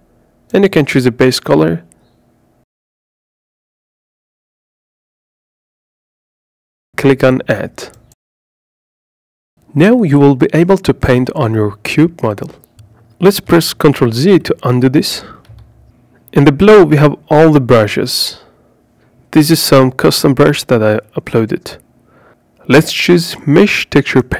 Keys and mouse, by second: 11.3 click, 12.2 click, 13.7 ctrl+z.